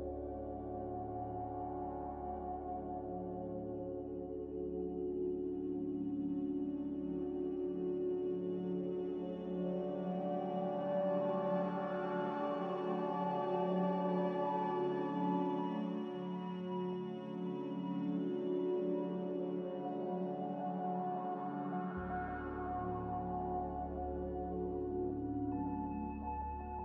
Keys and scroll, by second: 3.3 z, 15.4 1.